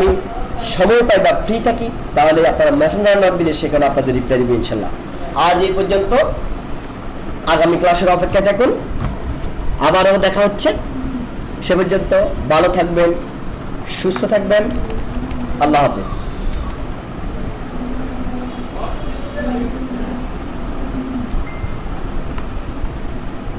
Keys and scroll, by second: 14.7 ctrl+=, 16.5 ctrl+-.